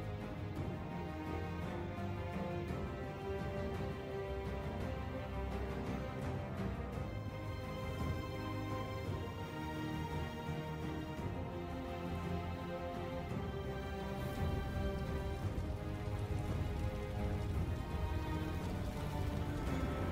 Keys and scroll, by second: 4.4-5.4 typing, 6.7-7.8 typing, 12.0 Tab, 16.9 ctrl+Tab, 17.6 ctrl+z.